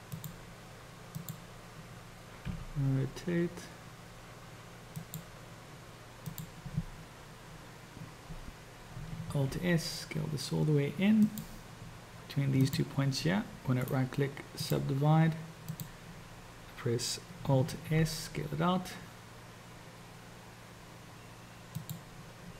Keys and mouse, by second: 1.3 click, 2.5 r, 9.3 alt+s, 12.7 shift+click, 13.9-15.1 drag, 15.8 click, 17.7 alt+s.